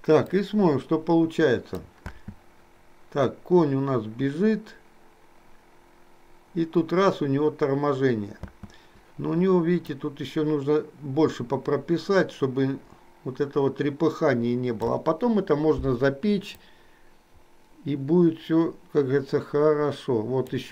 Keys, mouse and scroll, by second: 0.4-2.0 drag, 2.2 space, 8.6 space, 10.0-15.1 drag, 16.7-20.6 drag.